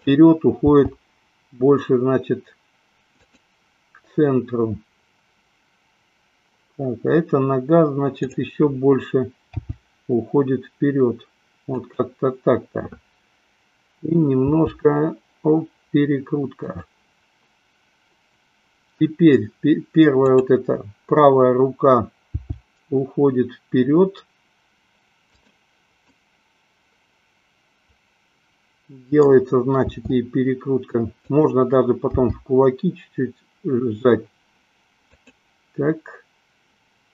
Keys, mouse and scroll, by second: 0.1 click, 0.9 g, 8.1 click, 9.9 g, 12.0 click, 14.5 r, 20.1 click, 22.5 g, 25.6 click, 26.4-29.6 middle drag, 30.1 r, 31.5 click, 32.4 g, 35.6 click.